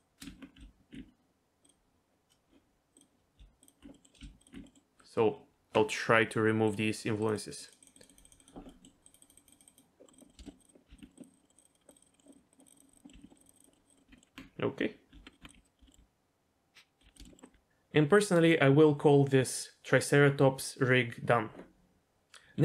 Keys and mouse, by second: 0.2 Tab, 2.9 click, 3.9 middle click, 4.6 middle click, 6.7 click, 7.3 click, 7.4 click, 7.6 click, 7.8 click, 7.9 click, 8.2 click, 8.3 click, 8.5 click, 8.7 middle click, 9.1 click, 9.6 click, 10.0 middle click, 10.3 middle click, 10.4 shift+middle click, 11.0 middle click, 11.3 click, 11.4 middle click, 11.9 click, 12.1 middle click, 12.3 click, 12.8 click, 13.0 middle click, 13.2 middle click, 13.4 click, 13.6 click, 13.7 middle click, 13.9 click, 13.9 middle click, 14.1 Tab, 14.1 middle click, 14.3 Tab, 15.1 Tab, 15.4 Tab, 15.5 g, 15.8 z, 15.9 g, 17.1 r, 17.2 shift+middle click, 17.5 r.